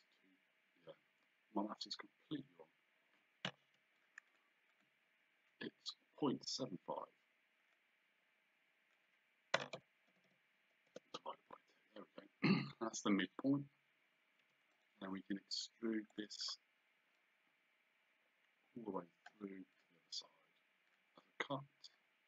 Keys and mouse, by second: 3.6 Escape, 4.0 click, 7.8 click, 9.6 KP_0, 10.9 Return, 14.5 Escape, 14.8 right click, 16.1 click, 17.2 click, 19.8 click, 20.9 click, 22.0 click.